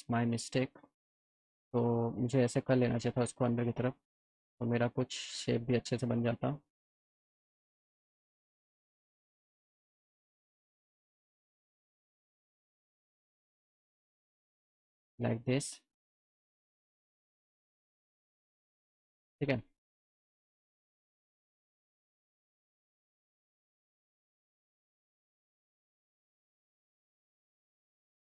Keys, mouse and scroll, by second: 0.2 click, 1.5-2.5 drag, 2.8 ctrl+z, 3.2 click, 4.3-5.3 drag, 5.8 click, 7.2 click, 8.1 ctrl+z, 8.6 alt+middle click, 10.4 click, 11.6 click, 12.7 click, 13.8-14.8 drag, 15.8 click, 16.8-18.3 drag, 18.5 scroll up 1, 18.9 click, 19.6 alt+middle click, 20.6 middle click, 21.8 click, 22.6 click, 22.9 click, 24.7 click, 25.5 alt+middle click, 27.7 alt+middle click.